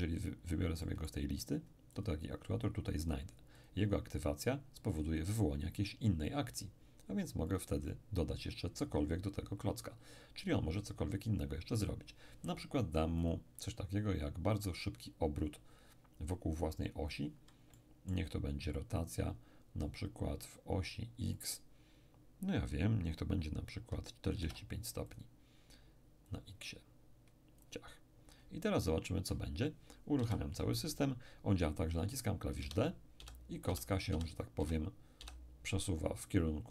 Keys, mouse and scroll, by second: 0.8-3.0 middle drag, 1.9 click, 3.5 click, 7.5 click, 13.2 click, 17.1 click, 17.7-19.0 middle drag, 21.3 click, 24.3 4, 25.1 click, 25.1 5, 26.3-28.5 drag, 28.6-30.0 middle drag, 30.2 p, 32.6 d, 33.1 d, 33.7 d.